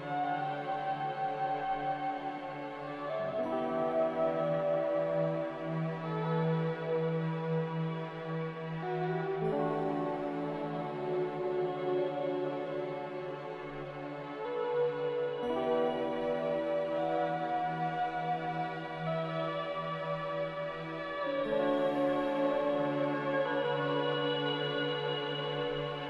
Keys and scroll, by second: 1.8 Delete.